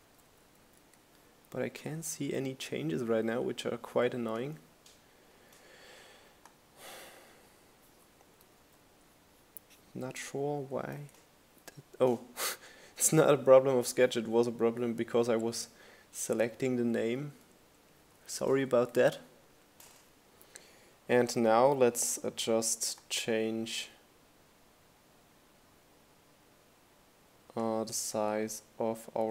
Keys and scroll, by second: 5.0 Up, 5.0 Right, 5.4 Right, 7.0 Right, 13.0 Right, 14.5 Down, 14.6 Right.